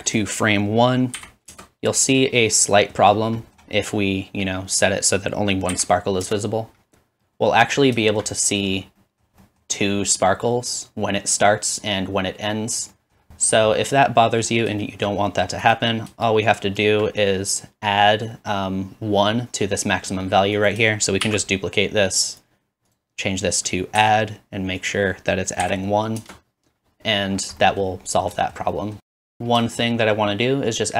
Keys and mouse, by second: 7.6-15.6 shift+drag, 15.7 click, 19.9-23.9 drag, 20.5 middle click, 20.5 right click, 21.2 shift+d, 22.9-23.9 middle drag, 22.9-23.9 right drag, 22.9 typing, 28.6 middle click, 29.0-30.9 shift+drag.